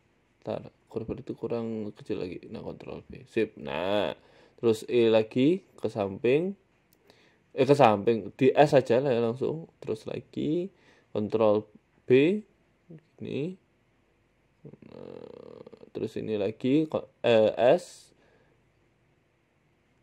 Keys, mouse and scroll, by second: 0.1 ctrl+z, 0.4 ctrl+z, 0.6 ctrl+z, 1.3 ctrl+b, 1.9 s, 2.7 ctrl+b, 3.5 Tab, 3.9 Tab, 4.1 click, 5.4 e, 5.8 s, 7.2 g, 9.8 ctrl+r, 10.9 s, 12.0 ctrl+b, 13.6 s, 14.6 g, 16.2 click, 16.9 s, 18.1 s, 19.3 e.